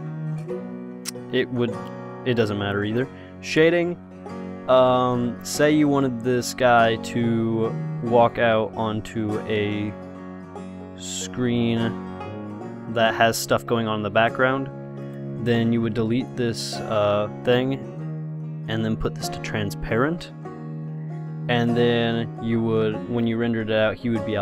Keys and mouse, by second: 2.5-17.1 drag, 16.1 x, 18.9-20.9 drag.